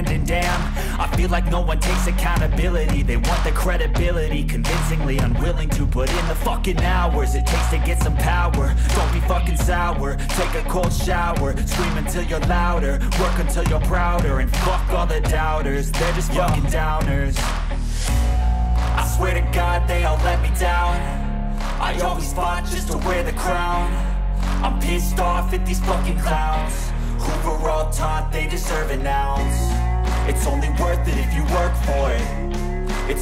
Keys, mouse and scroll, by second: 0.6 click, 4.0 click, 5.7 scroll, 6.7 middle click, 8.7 click, 10.1 click, 11.9 click, 12.7-13.2 typing, 14.3 Return, 17.6 click, 19.0 click, 22.9 click, 25.9 click, 26.3 click, 28.5 click, 29.5 click, 30.6 click.